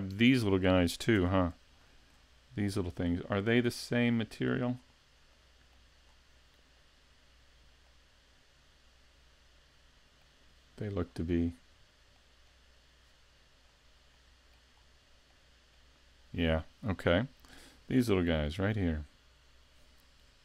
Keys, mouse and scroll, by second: 1.2 Tab, 1.8 shift+middle click, 2.3 scroll up 1, 3.3-4.4 scroll up 4, 3.6 middle click, 4.7 scroll up 3, 5.4 middle click, 6.1-6.6 scroll up 2, 7.0-7.9 scroll down 3, 7.9 middle click, 11.0 scroll up 4, 11.7-12.8 scroll down 3, 12.1 middle click, 12.8-13.6 scroll down 2, 13.6-14.3 scroll down 2, 14.1 middle click, 14.8 scroll up 4, 15.3 middle click, 18.3 l.